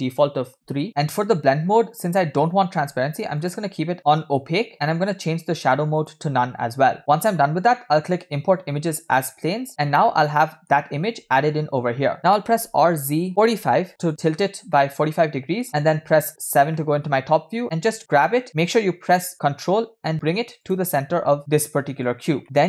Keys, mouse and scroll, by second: 9.9-15.8 middle drag, 15.9 KP_7, 16.8-17.3 shift+middle drag, 17.6 scroll up 1, 18.1 g, 21.4-22.6 middle drag.